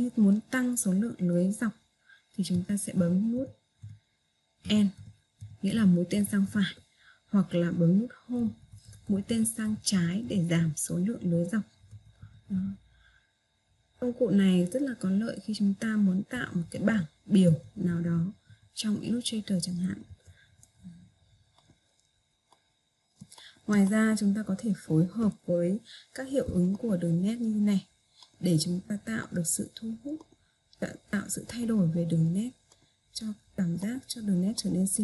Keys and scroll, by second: 5.1 End, 8.6 Home.